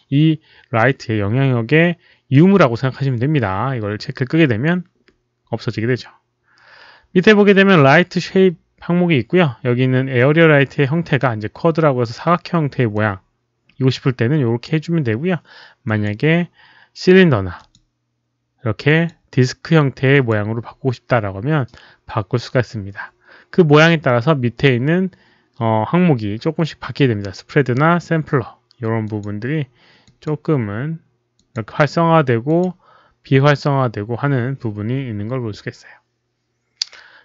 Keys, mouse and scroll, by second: 2.1 click, 12.9-14.6 drag, 15.8 click, 17.5 click, 18.8 click, 20.2 click, 23.8 click, 26.9 click, 29.1 click, 30.1 click, 31.5 click, 32.6 click.